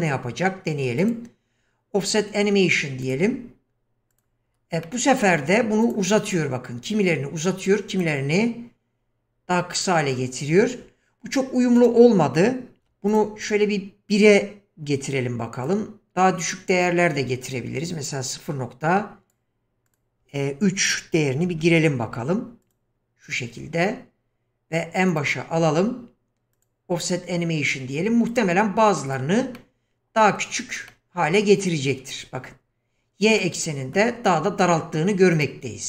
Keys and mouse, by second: 1.1 click, 3.0 click, 4.1 click, 4.8 middle drag, 5.9 click, 7.9 click, 11.9-13.2 drag, 15.6-19.4 drag, 19.9-22.7 drag, 25.2 click, 26.5 click, 28.4 click, 29.1 click, 29.6-30.5 middle drag, 30.9-31.9 middle drag, 33.4-34.0 middle drag, 35.4 click.